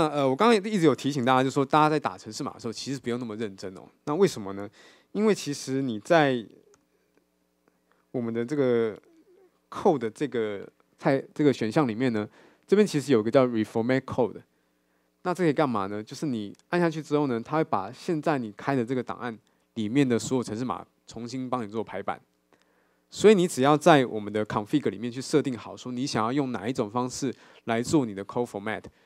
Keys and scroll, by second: 8.3 super+9, 17.3 alt+super+l.